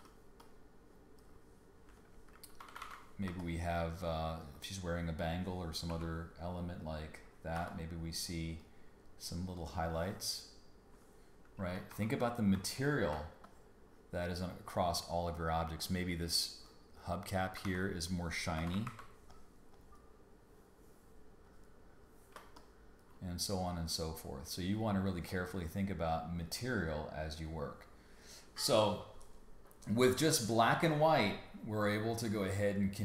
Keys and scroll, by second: 0.0 space, 1.4 space, 2.5 super+=, 3.2 space, 5.9 l, 7.5 b, 11.7 super+-, 12.3 super+-, 13.1 space, 17.6 super+z, 18.5 ], 22.3 space.